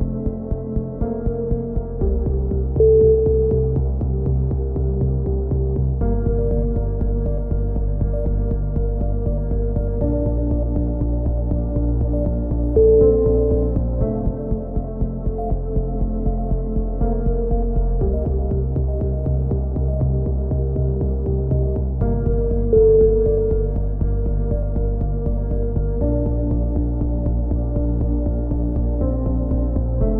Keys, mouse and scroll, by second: 0.5 middle click, 0.9 a, 1.4-2.4 drag, 2.4 middle click, 2.7 z, 3.0-4.5 drag, 4.8 ctrl+KP_7, 5.4 click, 5.7 z, 8.5 middle click, 9.2 click, 9.5-12.1 middle drag, 12.1 click, 15.9 KP_7, 18.6 z, 19.1 click, 22.9 click, 26.9 KP_3, 27.1 z, 27.5-29.6 drag, 29.6 middle click, 30.0 KP_7.